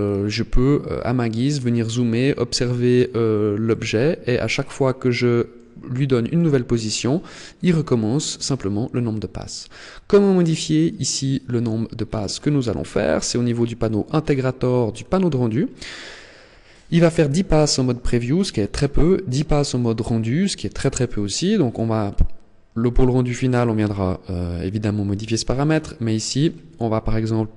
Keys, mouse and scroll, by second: 0.5 middle click, 1.6 middle click, 3.6 middle click, 5.7 middle click, 6.6-7.1 scroll up 3, 11.2-13.2 scroll down 13, 13.2 click, 14.7-16.8 scroll down 8, 21.4 click.